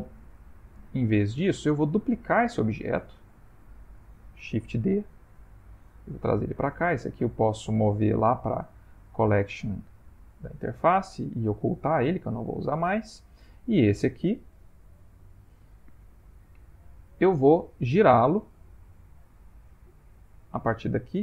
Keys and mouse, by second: 0.2 ctrl+middle click, 0.3 ctrl+middle click, 0.5 ctrl+middle click, 0.6 ctrl+middle click, 1.3 shift+middle click, 1.4 shift+middle click, 2.2 click, 2.7 ctrl+middle click, 3.5 middle click, 5.2 shift+d, 7.0 click, 8.1 m, 12.1 h, 12.6 middle click, 13.6 click, 15.1 middle click, 15.8-18.1 ctrl+middle click, 16.3 middle click, 17.8 middle click, 17.9 middle click, 19.0 Tab, 20.0 click.